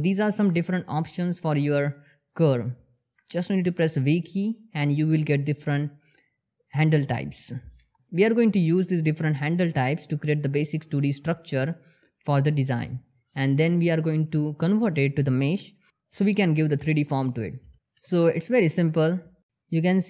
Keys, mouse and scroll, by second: 7.8 ctrl+z, 8.0 g, 8.2 click, 8.4 s, 8.6 click, 8.9 ctrl+z, 9.3 g, 10.5 click, 10.9 g, 11.1 click, 11.3 scroll down 1, 11.5 shift+middle click, 11.5 click, 11.9 g, 12.3 click, 12.9-15.7 typing, 13.6 click, 14.2 click, 14.7 shift+middle click, 15.0 click, 15.3 click, 16.0 click, 16.7 click, 17.0 g, 17.4 click, 18.2 g, 18.5-19.3 click, 19.7 r.